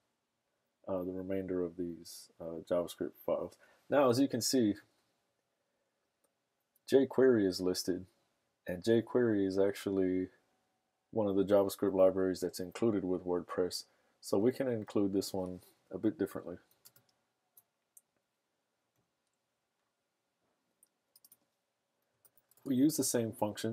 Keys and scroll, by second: 21.8-23.7 typing.